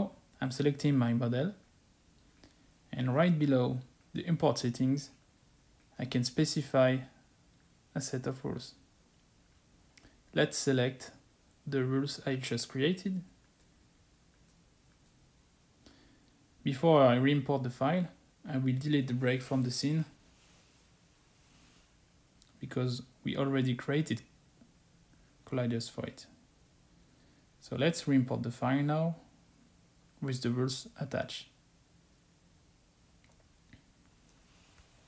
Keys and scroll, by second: 24.4 Delete.